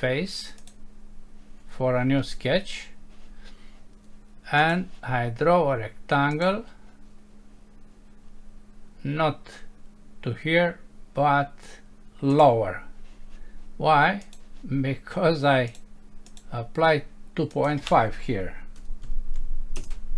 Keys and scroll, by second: 19.8 Return.